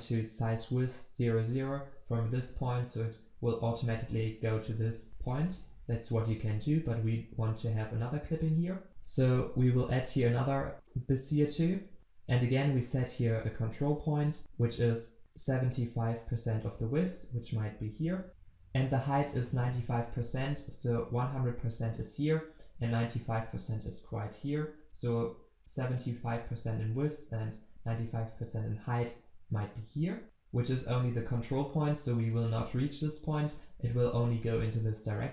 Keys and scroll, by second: 10.8 Return, 12.7 ctrl+c, 12.8 ctrl+v.